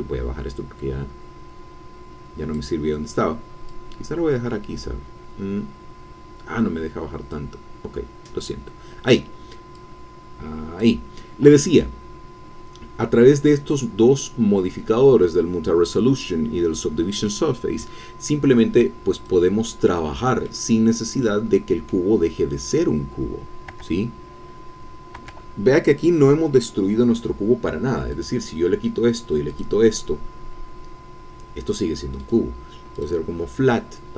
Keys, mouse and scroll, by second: 0.2-2.8 drag, 3.7-6.1 drag, 6.1 click, 6.5 click, 6.6-7.8 drag, 7.8 middle click, 8.5 click, 9.7-11.0 drag, 19.1 click, 20.0 click, 20.5 middle click, 21.2 middle click, 23.7 Tab, 25.7 Tab, 28.1 click, 29.5 click, 31.2-31.7 scroll down 1, 31.7-32.2 scroll up 1, 32.2 middle click, 32.4-32.8 scroll up 1, 32.9 click.